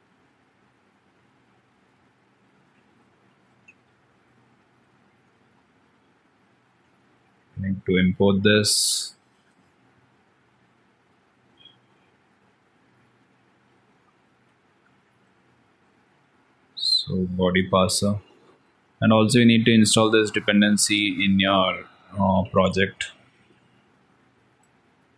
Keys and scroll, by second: 18.1 ctrl+s, 22.3 ctrl+c.